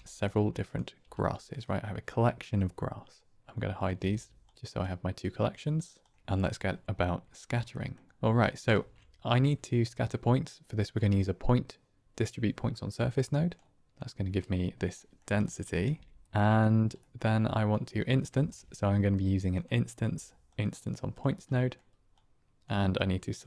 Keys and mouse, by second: 0.0 g, 0.9 g, 3.9-4.7 typing, 4.7-5.1 drag, 5.3 click, 5.9 click, 7.7 middle click, 8.1 click, 8.8 shift+a, 14.9 drag, 15.3 shift+click, 15.8 n, 16.9 middle click, 17.4 click, 18.4 shift+a, 21.4 middle click, 22.1 click, 23.0 click.